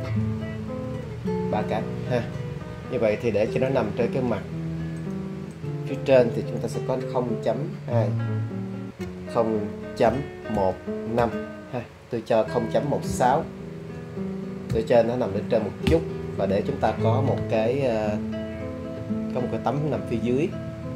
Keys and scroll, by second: 0.0 3, 0.8 Return, 9.1 0, 10.1 ., 10.6 1, 11.2 5, 13.6 BackSpace, 14.7 6, 15.9 Return.